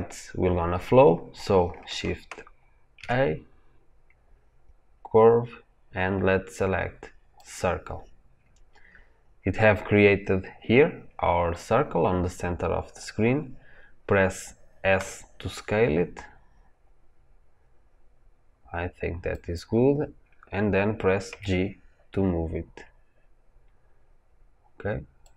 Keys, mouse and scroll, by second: 14.9 s, 21.2 g.